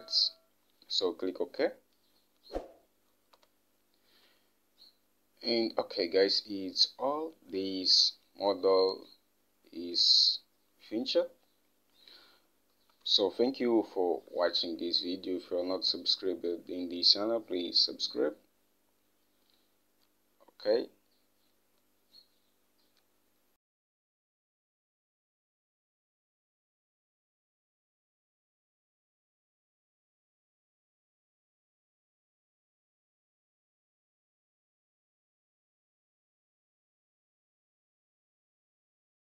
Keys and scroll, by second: 3.8 Home, 13.4 Home, 23.2 Left.